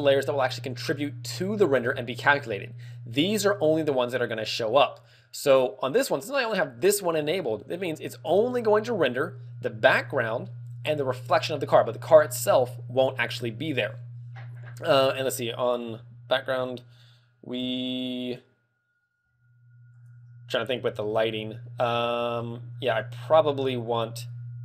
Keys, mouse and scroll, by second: 2.3 z, 19.9 click, 20.6-21.0 scroll down 3, 21.0 shift+middle click, 21.5-22.0 scroll up 4, 22.1 shift+middle click.